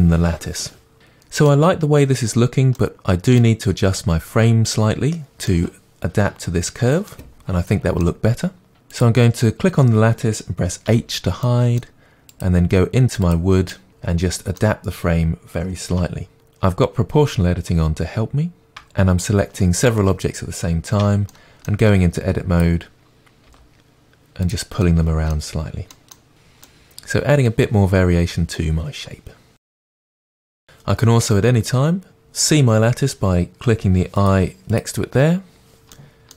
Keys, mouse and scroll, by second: 0.9 middle click, 8.7 click, 10.9 h, 11.4-12.3 middle drag, 12.3 click, 13.7-15.8 middle drag, 14.0 scroll up 2, 14.3 Tab, 14.7 click, 15.5 2, 15.8 click, 15.9-19.2 middle drag, 16.5 g, 18.8 Tab, 19.2 shift+click, 19.5 middle drag, 19.8 shift+click, 20.4 Tab, 20.5 middle click, 20.9 click, 21.1 g, 21.5 middle click, 22.0 click, 22.1 g, 22.4 middle click, 22.9 click, 22.9 g, 23.3 middle click, 23.9 Tab, 24.2 click, 24.5 click, 24.6 g, 25.0-26.1 middle drag, 25.3 s, 25.8 g, 26.1 Tab, 26.2 scroll down 2, 26.3-28.4 middle drag, 27.5 scroll up 2, 28.4 click, 28.5-34.2 middle drag, 34.2 click, 36.0-36.3 middle drag.